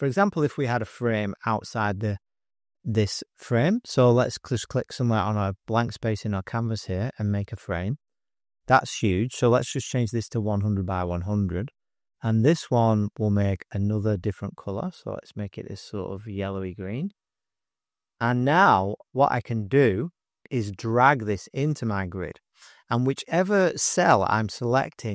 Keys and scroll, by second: 0.4 space, 0.5 space, 1.6 f, 9.2-11.0 typing, 19.3-20.2 typing.